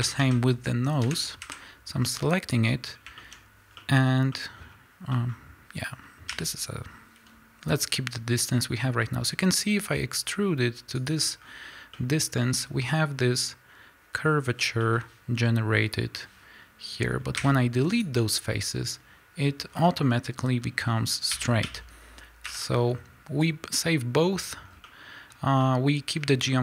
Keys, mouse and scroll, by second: 1.0 l, 1.3 KP_Decimal, 1.9 scroll down 2, 3.3-3.7 scroll up 2, 6.4 e, 11.0 click, 11.3-11.9 scroll up 1, 11.9-23.3 middle drag, 14.5 scroll down 1, 17.3 x, 19.6 scroll down 1, 20.7-21.3 scroll up 2, 21.3 a, 22.4 l, 23.3-24.8 drag, 24.6 scroll down 2, 24.8-26.6 middle drag.